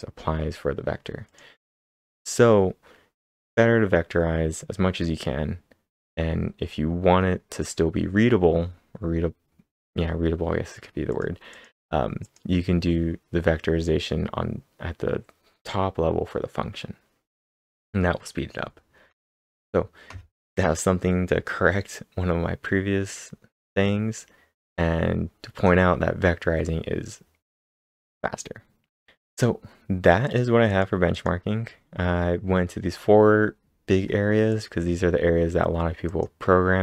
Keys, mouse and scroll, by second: 1.3 click, 2.0 click, 11.1 click, 11.5 click, 12.0-12.7 typing, 12.2 click, 17.5 click, 19.3-20.1 typing, 19.6-20.1 scroll up 1, 20.1-21.2 scroll up 2, 21.2-22.0 scroll down 1, 22.0-23.2 scroll down 2, 23.2-24.3 scroll down 4, 29.1 click, 29.1 scroll down 1, 29.3 click, 30.3 click, 30.7 click, 31.1 click, 34.5 click, 35.8-36.6 typing, 36.1 click.